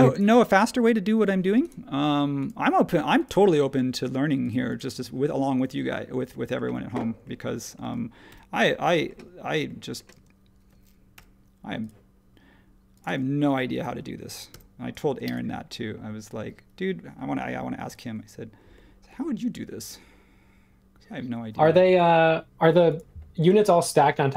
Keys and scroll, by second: 7.8 space, 10.1 space, 11.1 |, 13.0 space, 14.5 m.